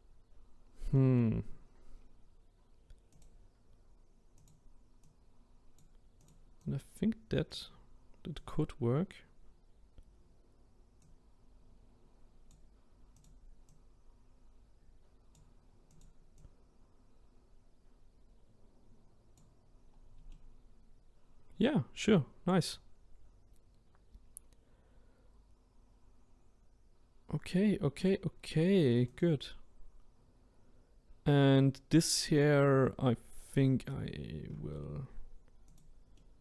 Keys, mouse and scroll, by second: 0.6-0.9 scroll down 1, 0.9-3.1 middle drag, 3.1 click, 4.4 click, 6.3 click, 6.6 click, 8.9-11.0 scroll up 1, 11.1 click, 13.2 click, 16.0 click, 16.4 click, 19.8-20.3 scroll down 1, 20.3-23.3 middle drag, 29.2 click, 35.7 click, 36.1-36.4 middle drag.